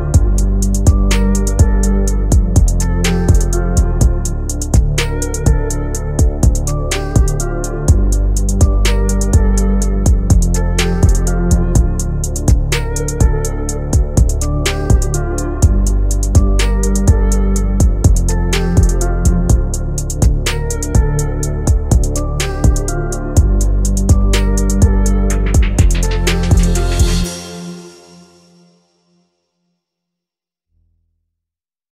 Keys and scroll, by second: 26.0 F9.